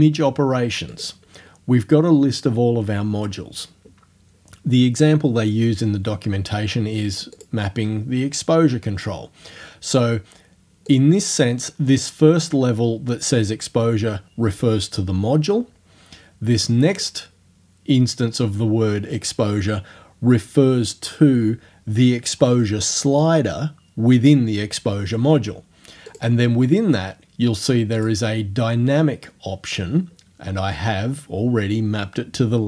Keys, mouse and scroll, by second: 0.9 click, 1.2-4.0 middle drag, 7.4 click, 8.2-8.8 scroll down 1, 10.9 click, 17.0 click, 26.1 click, 28.0 click.